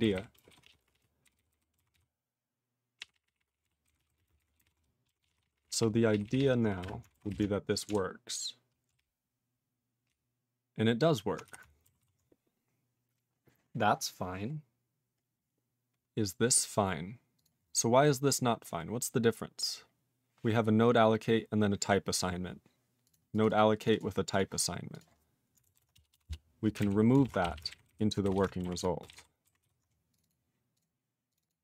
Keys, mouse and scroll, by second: 0.0 ctrl+n, 0.1 ctrl+n, 0.5 ctrl+s, 0.6 ctrl+p, 0.8 ctrl+p, 0.9 ctrl+p, 1.2 ctrl+n, 1.4 ctrl+n, 1.5 ctrl+n, 1.9 ctrl+s, 3.0 ctrl+p, 3.1 ctrl+p, 3.3 ctrl+p, 3.4 ctrl+p, 3.5 ctrl+p, 3.6 ctrl+p, 3.9 ctrl+n, 4.0 ctrl+a, 4.1 ctrl+n, 4.2 ctrl+space, 4.2 ctrl+e, 4.3 ctrl+n, 4.4 ctrl+n, 4.6 ctrl+g, 4.6 ctrl+e, 5.2 ctrl+s, 5.3 ctrl+p, 5.5 ctrl+p, 5.5 ctrl+p, 5.7 ctrl+p, 5.8 ctrl+p, 6.1 ctrl+p, 6.3 ctrl+p, 6.4 ctrl+p, 11.5 q, 12.0 ctrl+s, 14.7-16.8 scroll down 10, 17.4 click, 17.4 click, 18.8-20.1 scroll up 10, 21.4-23.0 scroll down 21, 23.0 click, 23.2 click, 23.3 click, 23.4 click, 23.5 double click, 23.6 double click, 23.8 click, 23.8 click, 23.9 double click, 24.0 double click, 24.3 click, 24.4 click, 25.7 ctrl+<, 26.8 ctrl+g, 27.2 ctrl+<, 27.4 /, 27.6 /, 27.7 ctrl+g, 27.9 ctrl+n, 28.2 BackSpace, 28.4 BackSpace, 28.9 ctrl+s, 29.0 ctrl+space, 29.1 ctrl+e, 29.1 ctrl+g, 29.6 ctrl+s, 30.1 click, 30.2 click, 30.2 double click, 30.3 double click, 30.7 click, 30.8 click, 31.3 click, 31.3 click, 31.4 double click, 31.5 double click.